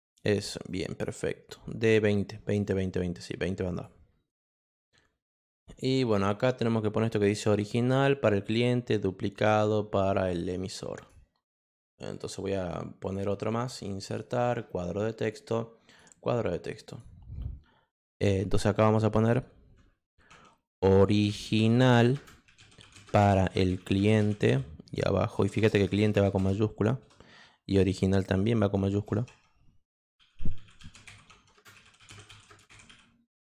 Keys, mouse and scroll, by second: 0.6 click, 2.6-3.8 drag, 10.9 click, 12.1 click, 13.0 click, 14.0 click, 15.2 click, 15.9 click, 16.8 click, 20.4-27.7 typing, 29.4-33.5 typing.